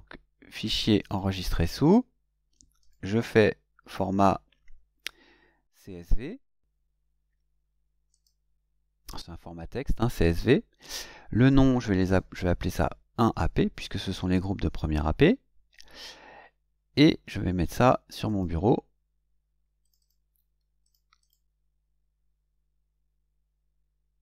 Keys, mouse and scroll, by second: 1.0 click, 2.8 click, 5.5-7.1 scroll down 7, 7.6 scroll down 2, 8.1 click, 11.5 click, 12.7-14.3 typing, 18.2 click, 19.8 click, 20.8 click, 21.2 click.